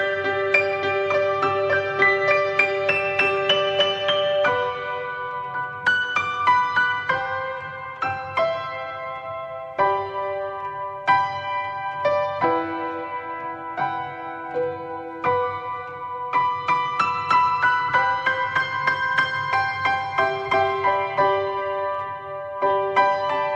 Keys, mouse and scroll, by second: 0.0 drag, 2.4 middle click, 2.5 scroll down 3, 2.7-4.5 middle drag, 4.5-7.2 drag, 8.8-10.9 drag, 11.3-11.6 scroll up 1, 11.6-12.1 middle drag, 12.1-12.5 scroll up 2, 12.5-14.5 middle drag, 14.5 click, 16.3 drag, 16.7 middle click, 16.8-17.2 scroll up 1, 17.2-18.1 shift+middle drag, 18.1 click, 19.3 click.